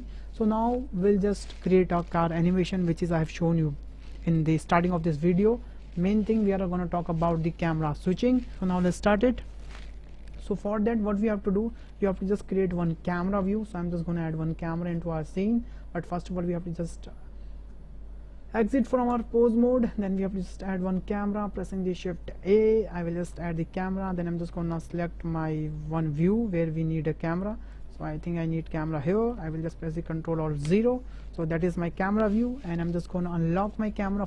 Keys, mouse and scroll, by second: 10.2 shift+drag, 10.7 drag, 10.9 middle click, 10.9 click, 10.9 right click, 11.3-11.6 ctrl+drag, 11.9 shift+drag, 12.3-12.9 drag, 14.2 shift+a, 15.0 click, 16.9-19.2 drag, 20.0 shift+a, 24.8-25.5 shift+middle drag, 26.1 middle click, 26.6-27.5 middle drag, 27.8 middle click, 28.3-28.7 middle drag, 28.9 shift+click, 30.6 ctrl+alt+KP_0, 33.6 click.